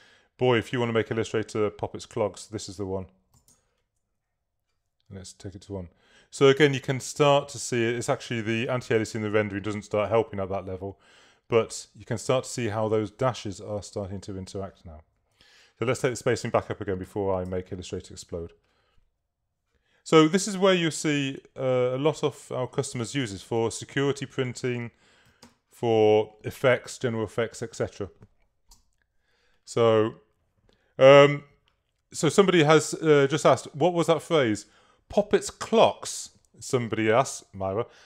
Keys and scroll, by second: 3.4 |, 3.6 Tab, 8.5 super++, 9.9 super+-, 11.1 super++, 17.1 2, 17.5 Tab, 22.2 super+-, 25.3 3, 28.7 v.